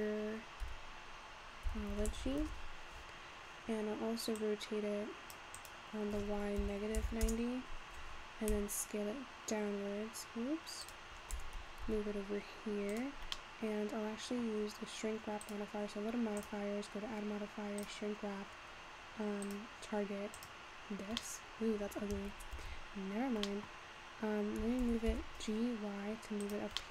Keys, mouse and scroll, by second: 0.0-2.3 typing, 2.4 Tab, 3.0-4.4 scroll down 2, 4.4-8.5 drag, 8.5 s, 11.3 g, 13.4-15.7 middle drag, 15.7 click, 16.5-19.6 drag, 21.3-22.7 middle drag, 22.7 ctrl+z, 23.7 middle click, 24.0 scroll up 1, 24.8 g, 26.8 middle click.